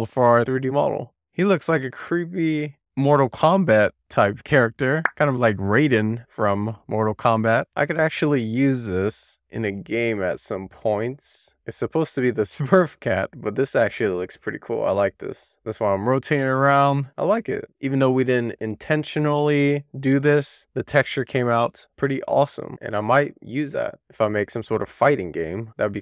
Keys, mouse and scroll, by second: 18.1 shift+middle click, 19.0 middle click, 19.5 middle click, 20.1 middle click, 21.2-22.6 middle drag, 23.6 click, 24.3-25.4 scroll up 2, 25.4-25.8 scroll down 2, 25.8 shift+middle click.